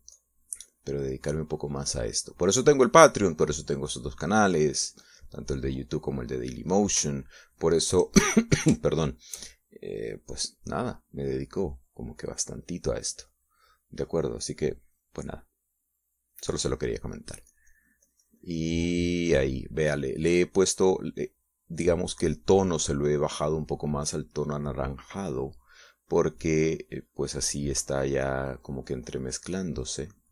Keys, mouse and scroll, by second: 6.1-7.1 drag, 7.4 middle click, 8.3 shift+middle click, 10.1 shift+middle click, 10.7 shift+middle click, 16.2-17.8 drag, 18.7-21.0 drag, 21.9-30.3 drag.